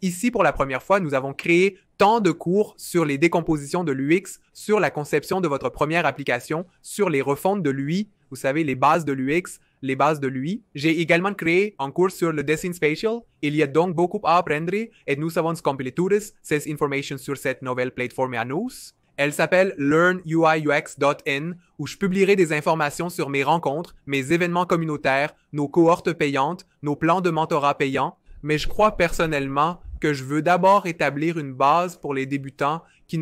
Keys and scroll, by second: 15.0 2.